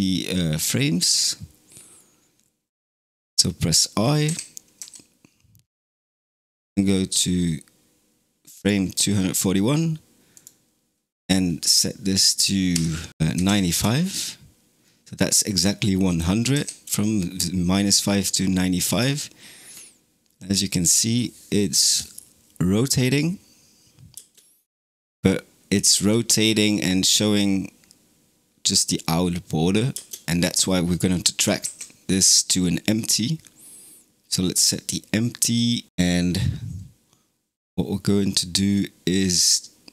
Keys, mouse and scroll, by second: 4.1 o, 4.7 |, 6.1-9.1 drag, 10.2-13.1 drag, 16.4 i, 18.7 space, 24.0 space, 25.8 space, 29.8 space, 31.5 shift+a.